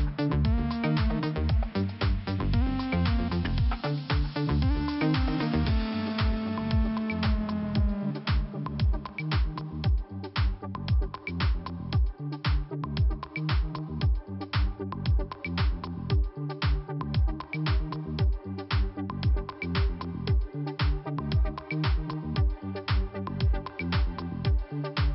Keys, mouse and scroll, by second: 1.8 click, 3.2 click, 3.3 click, 7.0 click, 7.1 click, 7.6 middle click, 8.4 click, 9.6 scroll down 1, 11.3 click, 11.3 click, 11.4 click, 11.5 double click, 12.4 double click, 15.6 middle click, 17.6 click, 17.7 click, 17.8 click, 18.0 double click.